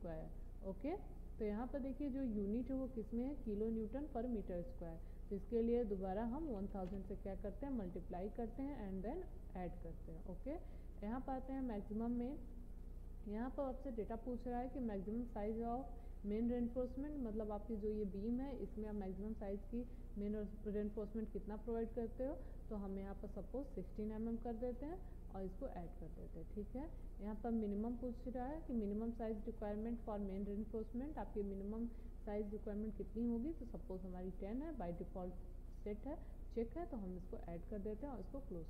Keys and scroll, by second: 6.4 0.